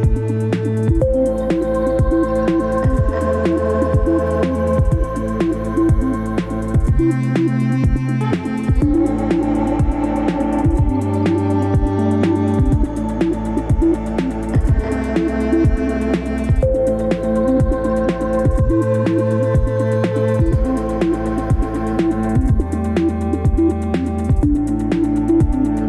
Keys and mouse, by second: 0.6 click, 2.7-3.4 middle drag, 3.9-4.5 middle drag, 4.9 click, 7.9 s, 15.6-16.1 middle drag.